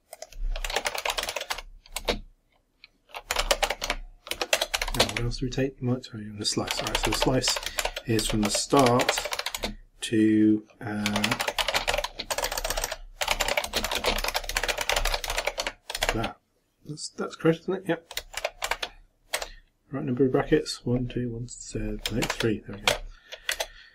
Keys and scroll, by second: 1.3 shift+-, 1.5 shift+,, 2.0 shift+space, 7.6-9.9 typing, 13.6-16.0 typing, 18.4 shift+o, 22.3 shift+o, 23.6 shift+Return.